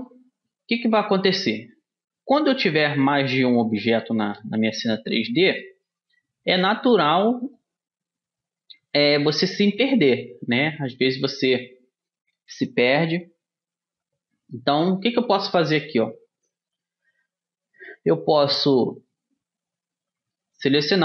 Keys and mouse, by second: 3.4-5.8 right drag, 5.8-15.0 middle drag, 15.5 middle click, 18.0-19.6 right drag, 19.6-20.6 middle drag.